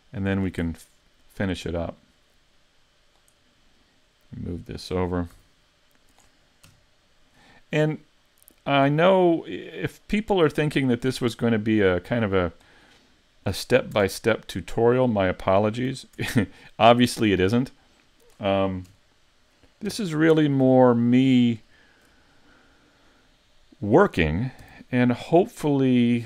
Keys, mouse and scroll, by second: 0.8 middle click, 2.4 click, 3.8 click, 5.3 s, 6.7 KP_Decimal, 7.3-7.8 scroll down 5, 7.8 middle click, 9.5 click, 10.8 middle click, 14.0 Tab, 15.9 a, 16.2 Tab, 16.9-17.5 scroll down 3, 17.5 middle click, 18.9 KP_1, 19.9 KP_5, 20.6 z, 21.7 shift+middle click, 22.3 scroll up 3, 24.6 g.